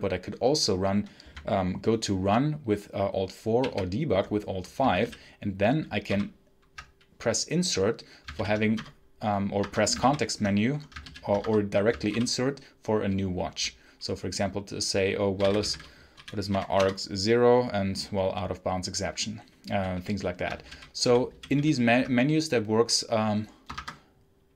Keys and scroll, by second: 3.5 alt+5, 4.9 Down, 6.0 Menu, 8.2 Down, 8.7 Return, 9.5 Escape, 9.9 Menu, 10.9 Down, 11.3 Escape, 12.0 Insert, 15.0-16.9 typing, 20.5 Down, 20.6 Right, 21.0 Up, 21.2 Down, 21.4 Up, 23.6 shift+Escape.